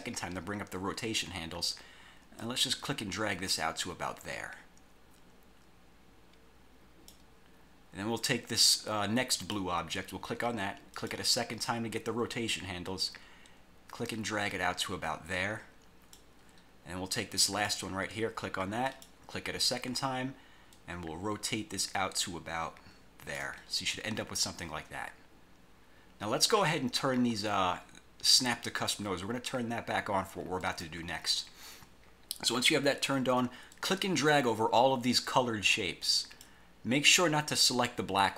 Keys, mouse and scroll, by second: 2.5-7.4 drag, 9.5 click, 11.1 click, 13.2-16.5 drag, 17.6 click, 19.0 click, 20.9-23.7 drag, 30.8 click, 33.8-36.8 drag.